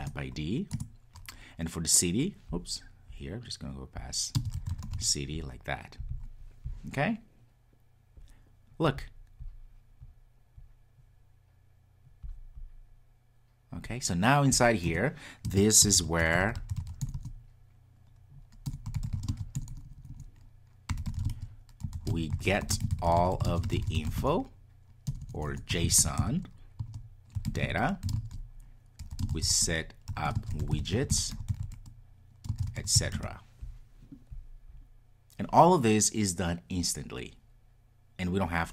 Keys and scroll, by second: 0.0 Return.